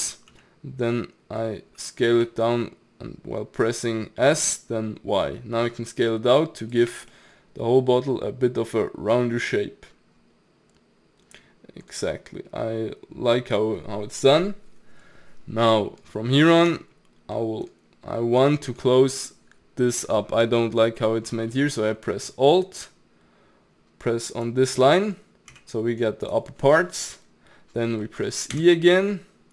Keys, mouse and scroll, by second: 0.3 s, 6.9 Tab, 7.1-10.1 middle drag, 16.7 Tab, 17.4 middle click, 18.1-18.6 scroll up 2, 18.6-24.3 shift+middle drag, 24.3 alt+click, 24.8-25.5 middle drag, 25.5 g, 28.0 middle click, 28.6 e.